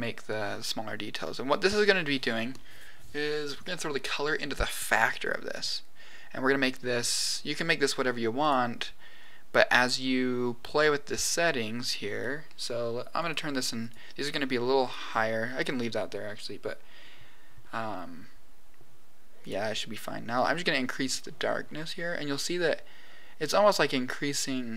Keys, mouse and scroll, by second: 1.7 click, 4.0-5.0 drag, 7.1 click, 8.4 click, 13.1 click, 14.3 click, 19.3 click, 20.3-21.3 drag.